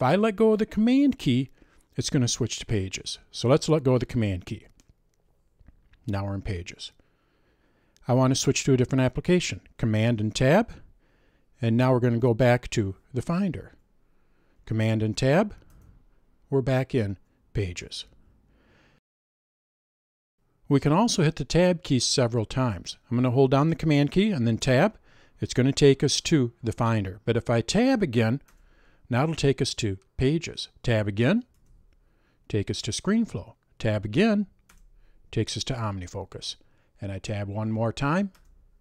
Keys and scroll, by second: 10.5 super+Tab, 15.7 super+Tab, 24.7 super+Tab, 28.5 super+Tab, 31.6 super+Tab, 34.7 super+Tab, 38.4 super+Tab.